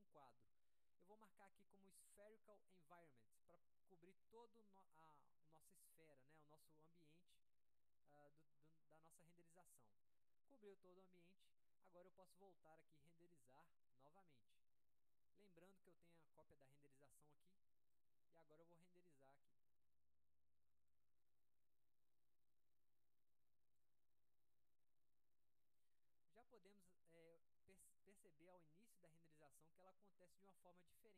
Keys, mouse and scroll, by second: 1.6 click, 3.6 click, 12.0 click, 13.5 click, 16.8 click, 18.1 click, 19.6 drag, 21.2-24.0 drag.